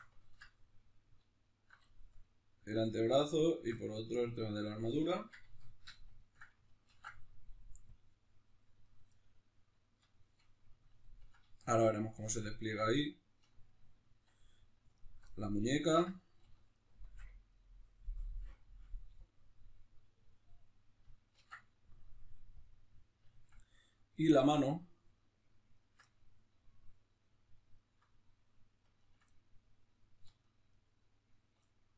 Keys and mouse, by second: 0.2-1.4 ctrl+middle drag, 1.4 alt+shift+right click, 1.9-3.5 shift+middle drag, 3.5 alt+shift+right click, 3.7-8.8 middle drag, 6.9 ctrl+e, 8.8 right click, 9.1-14.9 middle drag, 14.9 alt+right click, 15.3 middle click, 15.8 alt+shift+right click, 16.2 middle click, 16.7 alt+shift+right click, 17.5-24.1 middle drag, 21.3 ctrl+e, 24.1 right click, 24.4-25.7 middle drag, 25.7 ctrl+right click, 26.1-27.7 middle drag, 27.7-29.3 ctrl+right drag, 29.3-30.4 middle drag, 30.4-31.7 shift+right drag, 31.7-31.9 middle drag.